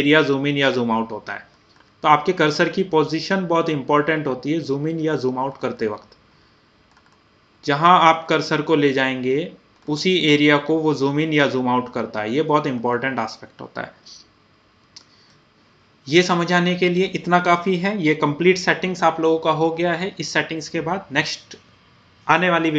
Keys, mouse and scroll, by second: 0.3 scroll, 0.5 scroll down 1, 3.9-4.2 scroll up 1, 3.9 typing, 4.4 scroll down 1, 5.3 scroll, 5.5 scroll up 1, 5.9 scroll down 1, 6.6 scroll up 1, 7.2 scroll down 1, 7.7 scroll up 1, 8.4 scroll down 1, 8.7 typing, 9.5 scroll up 1, 10.1 scroll down 1, 10.9 scroll up 1, 11.4 scroll down 1, 12.3 scroll up 1, 12.9-13.5 scroll down 2, 15.7-19.1 middle drag.